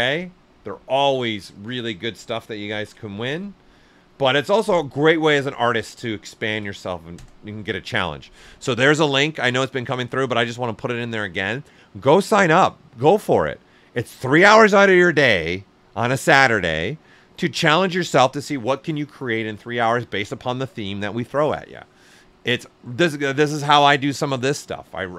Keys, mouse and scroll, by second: 2.6 ctrl+c, 4.0 click, 4.0 typing, 6.4 ctrl+v.